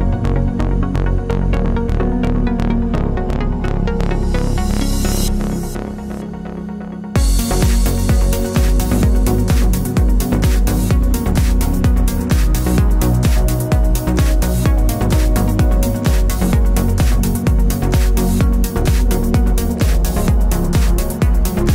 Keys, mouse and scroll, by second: 0.8-1.5 typing, 1.6 click, 3.2 KP_Add, 3.4 KP_1, 3.7 KP_2, 3.9 KP_3, 5.0-7.6 typing, 7.8 KP_Enter, 8.8 click, 9.3 KP_2, 11.8 KP_Enter, 12.9 click, 13.9 KP_3, 14.1 KP_0, 14.2 KP_Enter, 16.4 click, 18.4 KP_4, 18.5 KP_0, 18.6 KP_Enter, 20.2 click.